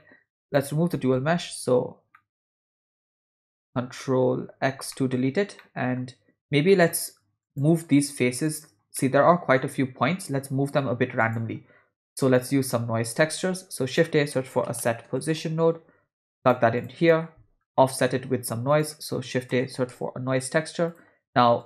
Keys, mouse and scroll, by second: 0.0 middle click, 0.5 click, 2.2 middle click, 4.7 ctrl+x, 4.9 middle click, 5.6 middle click, 6.7 middle click, 7.4 click, 8.5 click, 9.0 middle click, 11.3 click, 12.4 click, 13.1 shift+a, 17.1 middle click, 17.8 middle click, 18.1 shift+a.